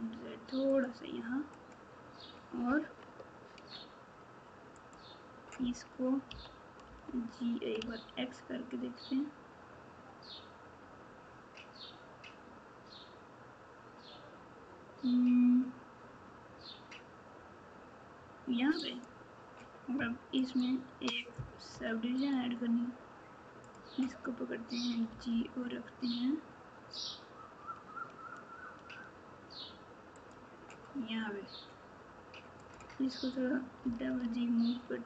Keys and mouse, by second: 4.8 click, 6.2 g, 23.6 click, 32.5 click, 33.8 g.